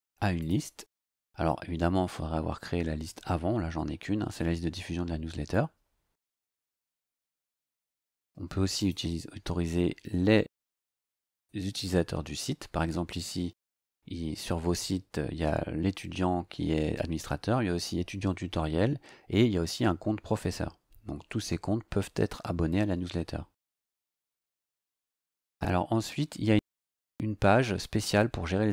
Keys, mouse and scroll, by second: 0.4 click, 8.8 click, 10.5 click, 11.3 click, 23.5-23.9 scroll down 2.